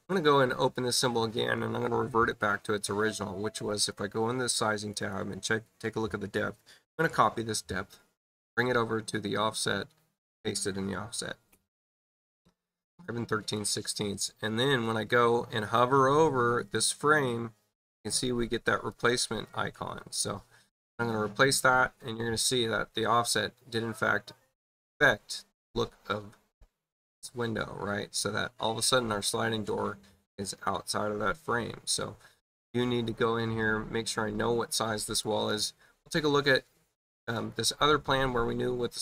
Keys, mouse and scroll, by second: 0.7 click, 3.6 click, 4.9 click, 8.2 click, 9.2-10.4 drag, 13.2 click, 18.8 click, 35.0 click, 36.4 space, 37.0 click, 37.3 click.